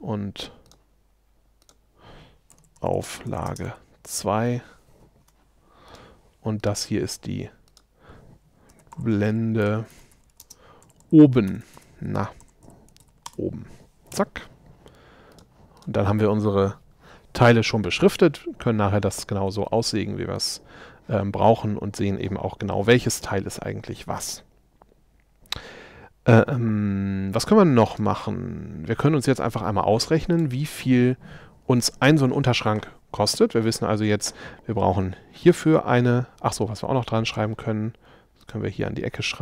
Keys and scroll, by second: 2.6 shift+a, 3.7 2.